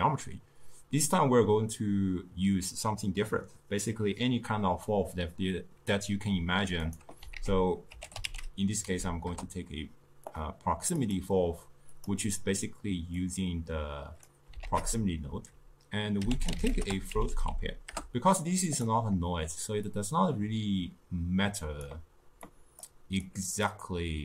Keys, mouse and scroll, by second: 11.4 click, 14.4-22.0 drag.